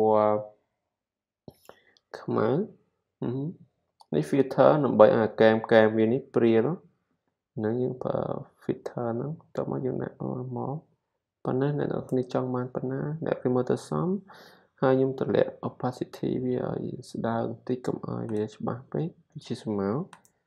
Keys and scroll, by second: 5.5 super+d, 7.2 super+t, 19.0 z.